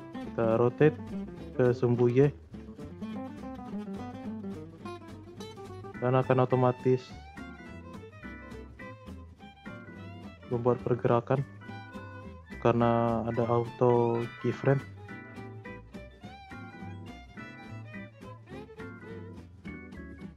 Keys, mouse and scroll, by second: 2.9 r, 8.2 click, 9.7 click, 10.5-13.6 drag, 15.9-18.6 drag, 18.6 r.